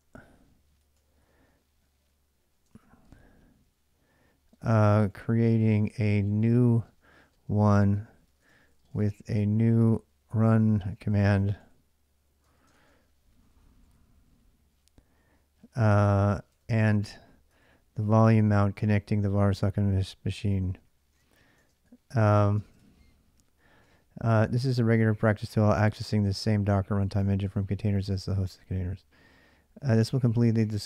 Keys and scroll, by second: 0.0-2.5 typing, 4.3-23.2 typing, 17.4 ctrl+[, 23.7 ctrl+[, 23.7 ctrl+j, 24.6-30.8 typing.